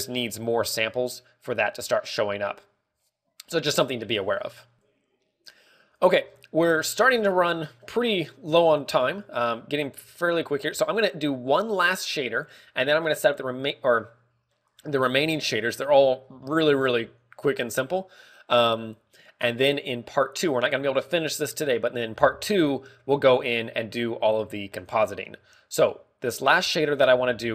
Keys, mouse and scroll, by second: 6.6 click, 7.0 scroll down 5, 7.6 shift+middle click, 7.9 scroll up 4, 8.3 shift+middle click, 8.8 scroll down 1, 9.7 shift+middle click, 10.3 scroll down 3, 10.7 KP_1, 11.3 shift+middle click, 11.6 scroll up 1, 12.3 scroll up 1, 16.8 scroll up 2, 17.2 shift+middle click, 17.6 scroll up 3, 27.1-27.4 scroll up 1.